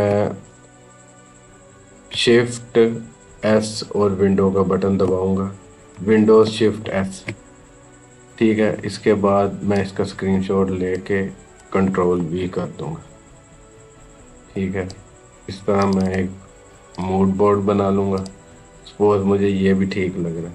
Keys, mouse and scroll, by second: 3.3 shift+s, 6.6 shift+super+s, 9.9 click, 10.8 click, 12.0 ctrl+v, 13.5-15.7 drag.